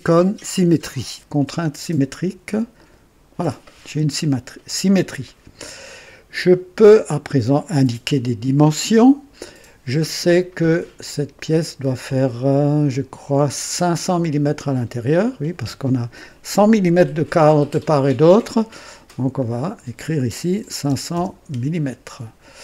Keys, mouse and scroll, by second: 1.3 y, 2.7 click, 11.0 click, 19.3 click, 20.5 KP_5, 20.8 KP_0, 21.0 KP_0, 21.1 KP_0, 21.4 KP_Enter.